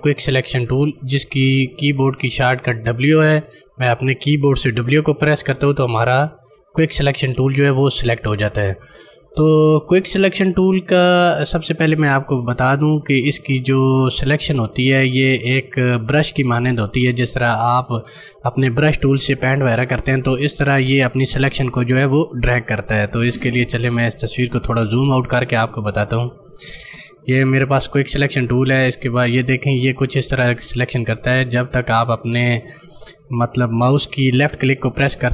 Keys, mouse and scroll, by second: 4.9 w, 23.7 click, 24.1 right click, 24.7 click.